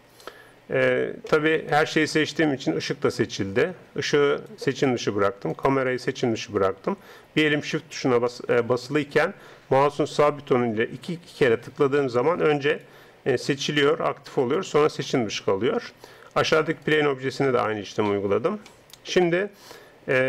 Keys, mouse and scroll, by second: 1.3 middle click, 3.1-4.3 middle drag, 4.3-8.3 right drag, 8.3-12.7 middle drag, 12.7-16.4 right drag, 15.1-16.1 middle drag, 16.4-20.2 middle drag.